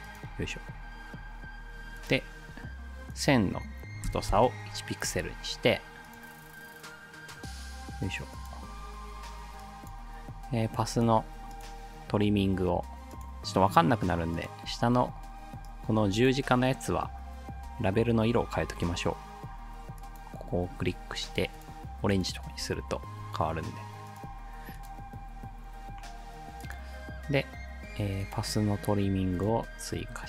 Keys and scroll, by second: 4.1 1, 4.3 Return.